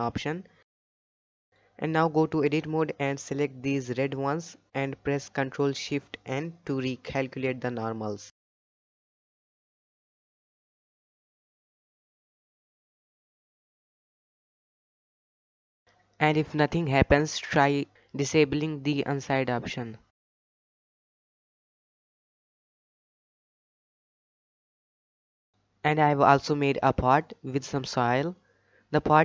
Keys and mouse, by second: 1.5-1.9 shift+middle drag, 2.6 click, 3.0 Tab, 3.4 middle click, 4.0-5.4 typing, 6.9 ctrl+shift+n, 8.0 shift+click, 8.5 shift+middle click, 9.7 alt+a, 10.3 Tab, 10.6 click, 11.2 Tab, 11.9 alt+a, 12.6 l, 13.1 l, 14.5 ctrl+shift+n, 17.0 ctrl+shift+n, 17.6 click, 20.1 Tab, 20.9 shift+middle drag, 22.3-23.7 drag, 24.3 click, 25.4-26.0 shift+middle drag, 27.0 click, 27.5-27.9 shift+middle drag, 28.0-28.5 middle drag, 28.8-29.2 shift+middle drag.